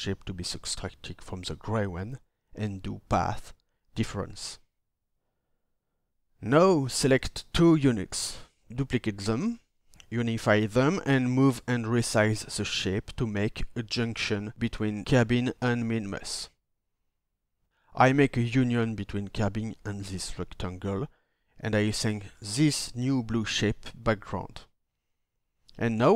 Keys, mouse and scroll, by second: 8.0 ctrl+d.